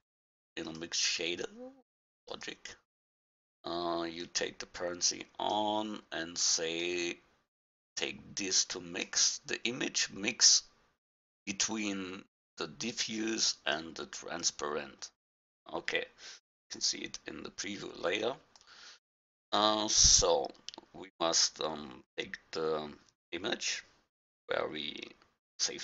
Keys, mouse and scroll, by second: 4.2-6.0 drag, 6.8-8.6 drag, 12.9-14.4 drag, 16.3-16.7 middle drag, 18.6-20.4 drag, 25.6 click.